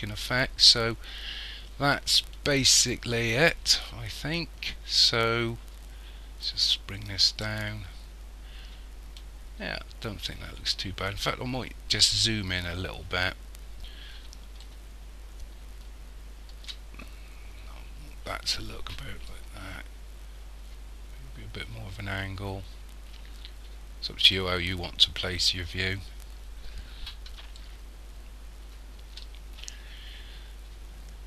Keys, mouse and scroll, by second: 7.1 click, 12.8 scroll up 1, 19.3 middle click, 27.6 ctrl+middle click.